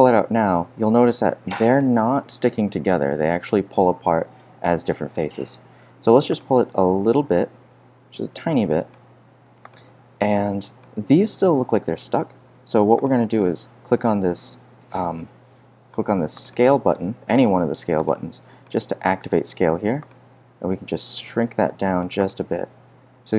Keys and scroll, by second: 6.7 z.